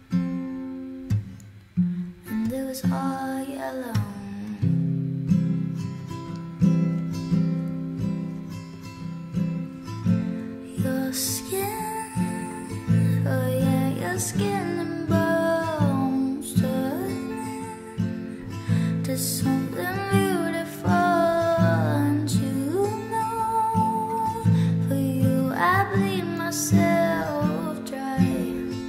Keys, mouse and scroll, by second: 20.5 p.